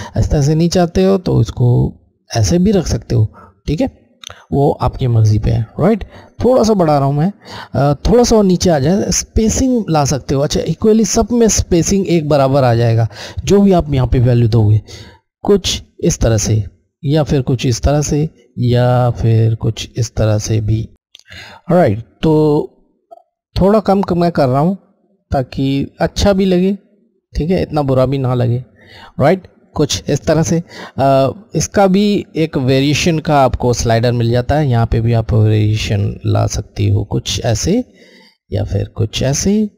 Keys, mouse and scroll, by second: 5.4 click, 15.2 click, 16.0 click, 22.8 click, 34.8 click.